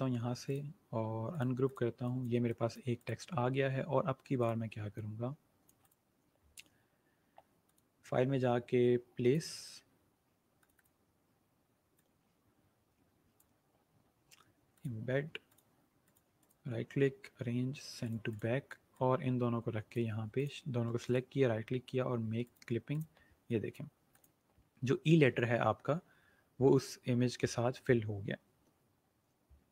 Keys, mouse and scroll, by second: 0.5 right click, 1.4 click, 7.6 click, 16.3 right click, 17.9 click, 20.9 right click, 22.3 click.